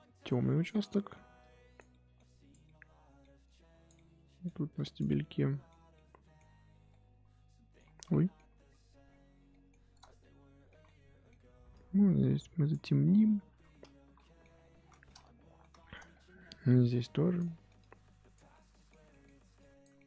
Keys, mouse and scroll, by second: 0.7 middle click, 1.4 click, 1.9 middle click, 2.2 click, 2.6 middle click, 3.4 click, 3.9 middle click, 4.7 click, 5.0-6.5 middle drag, 6.5-6.9 scroll up 2, 6.9 middle click, 7.9 scroll up 2, 8.1-8.4 scroll down 1, 8.4-9.5 scroll up 10, 9.5 middle click, 9.9 scroll down 2, 10.2-11.7 middle drag, 11.7-14.1 drag, 14.1 middle click, 14.6-14.9 scroll down 3, 14.9-16.8 shift+middle drag, 16.8 click, 17.4 middle click, 17.8 click, 18.5-19.6 middle drag, 19.6 click, 19.9 middle click.